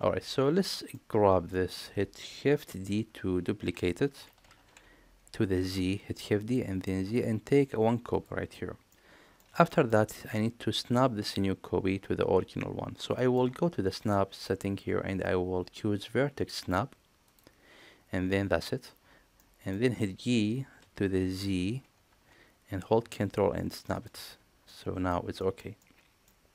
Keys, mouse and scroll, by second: 0.7 middle click, 1.5 middle click, 4.5 shift+d, 8.9-9.3 middle drag, 9.6 shift+middle click, 10.0 middle click, 13.1 shift+middle click, 14.0-18.8 drag, 19.3 middle click, 20.8 g, 24.6-25.1 middle drag, 25.4 shift+middle click, 25.8-26.2 middle drag.